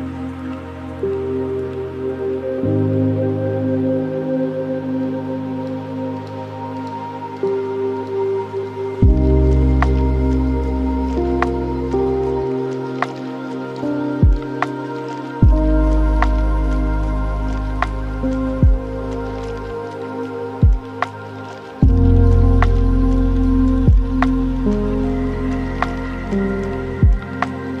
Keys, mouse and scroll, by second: 0.0-4.0 drag, 6.2-6.7 scroll down 5, 6.7-7.8 middle drag, 7.8 shift+a, 10.9-11.3 scroll up 3, 11.3-13.2 drag, 13.2-13.5 scroll down 3, 13.5 middle click, 14.2-15.6 scroll up 2, 15.6 KP_7, 17.0-17.8 scroll down 1, 17.8-20.9 shift+drag, 25.7-27.1 shift+drag, 27.4-27.8 scroll down 5.